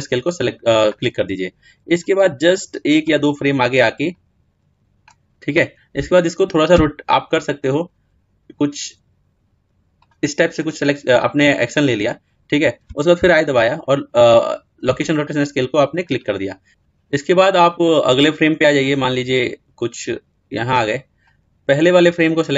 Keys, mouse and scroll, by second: 2.2-9.8 drag, 14.2 i, 18.3 click.